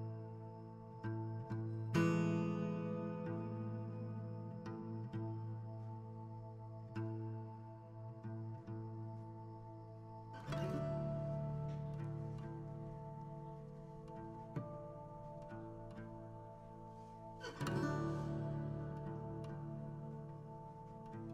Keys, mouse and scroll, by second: 1.3-3.3 drag, 7.2-9.3 drag, 9.8-12.4 drag, 12.9 KP_7, 13.3 KP_5, 13.8-14.8 shift+middle drag, 14.8 g, 15.7 r, 16.9 g, 17.9 r, 19.4 g, 20.6 r.